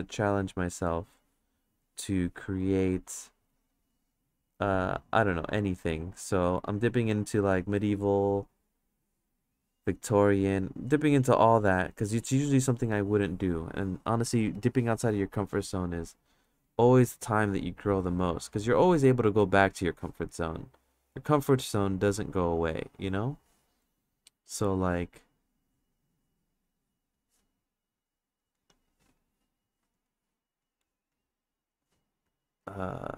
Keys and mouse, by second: 0.1 click, 0.9 click, 1.7 click, 3.2 click, 3.7 click, 4.5 click, 5.3 click, 6.2-7.5 drag, 8.3 click, 10.0 click, 10.3 click, 11.2 click, 12.6 click, 14.6 click, 16.4 click, 17.2 click, 18.4 click, 20.4 click, 21.9 click, 23.0 click, 23.8 click, 24.3 click, 24.6 click, 25.4 click, 26.0 click, 26.8 click, 27.9 click, 28.4 click, 28.9 click, 29.7 click, 30.6 click, 31.7 click, 32.6 click.